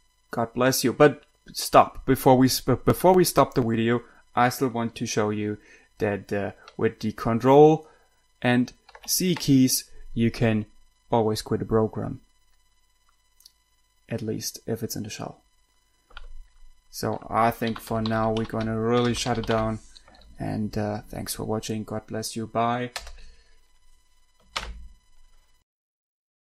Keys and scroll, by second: 9.2 ctrl+c, 17.8-20.3 typing, 23.2 Return.